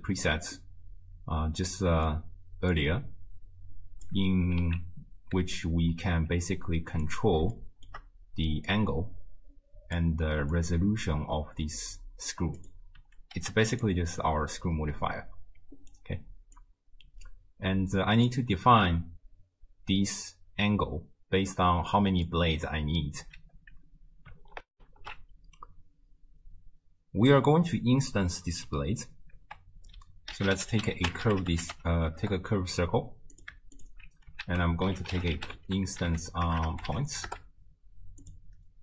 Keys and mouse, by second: 1.7 middle click, 2.7-4.1 drag, 4.6 z, 5.4 z, 6.3 z, 7.7 shift+click, 8.7-10.0 drag, 10.5-12.3 drag, 12.6-13.9 drag, 16.6-18.3 drag, 21.9-22.3 middle drag, 24.7 ctrl+alt+shift+w, 25.1 ctrl+alt+shift+q, 29.4 ctrl+a, 33.8 alt+shift+click, 34.5 ctrl+a, 36.6 BackSpace.